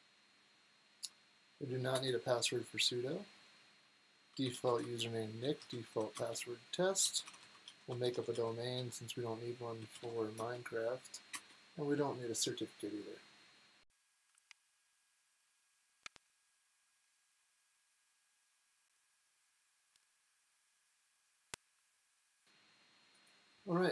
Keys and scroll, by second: 1.9 Return, 4.0-11.3 typing.